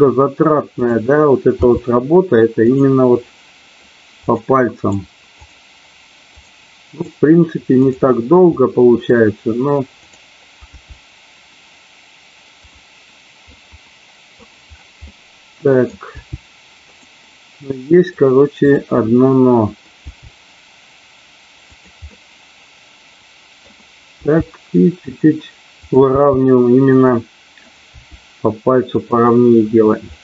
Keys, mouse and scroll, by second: 0.7 click, 1.5 g, 2.6 click, 3.2 middle click, 4.4 click, 4.9 right click, 6.2 click, 7.0-8.0 right drag, 8.5 middle click, 10.6 g, 12.6 click, 13.5 middle click, 15.0 middle click, 16.1 g, 16.9 click, 17.6 middle click, 19.1 middle click, 19.9 g, 22.0-23.6 middle drag, 24.1 g, 25.0 click, 25.9 click, 26.1 g, 27.6 click, 28.0 g, 29.1 click, 30.0-30.2 middle drag.